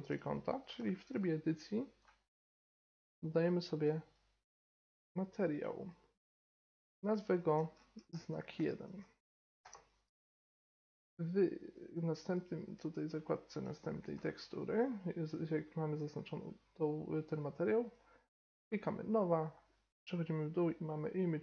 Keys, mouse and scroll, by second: 2.5-8.9 drag, 8.9 BackSpace, 11.7-13.4 drag, 14.0-21.4 drag.